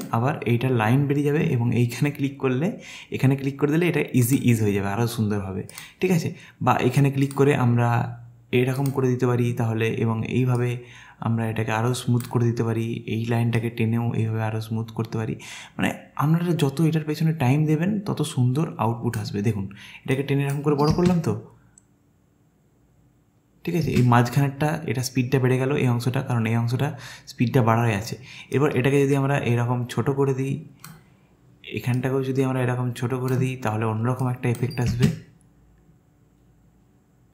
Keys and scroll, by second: 20.9 space, 23.9 space, 34.9 space.